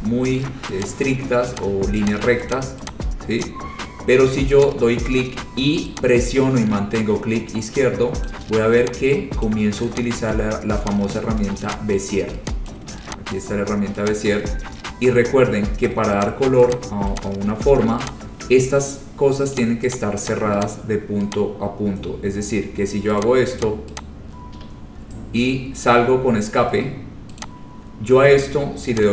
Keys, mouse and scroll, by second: 0.0 click, 1.0 click, 1.8 click, 2.3 click, 2.7 click, 3.0 click, 3.6 click, 4.8 right click, 8.4 click, 9.6 click, 10.4 click, 11.3 click, 12.2 click, 12.8 click, 13.5 click, 14.2 click, 14.7-16.1 scroll, 16.4 click, 16.9 click, 17.3 click, 18.3 click, 18.8-19.3 scroll, 19.7 click, 20.1 click, 20.4 click, 20.8 click, 21.5 click, 22.0-23.0 scroll, 23.4 click, 23.8 click, 24.2 click, 24.7 Escape, 25.1-25.8 scroll, 27.6 click.